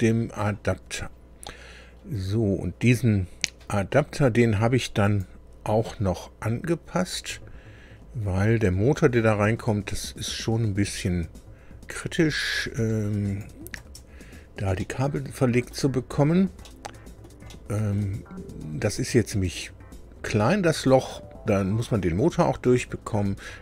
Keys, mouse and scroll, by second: 0.9 scroll down 2, 5.0 click, 7.5-7.9 scroll up 2, 8.6 scroll up 2, 9.7-10.5 scroll up 2, 10.5 scroll up 1, 11.5 scroll up 2, 13.2 click, 13.7 space, 14.7-15.9 drag, 16.2 scroll up 2, 16.6 click, 17.4 shift+click, 17.5 shift+middle click, 22.7-23.1 scroll down 2.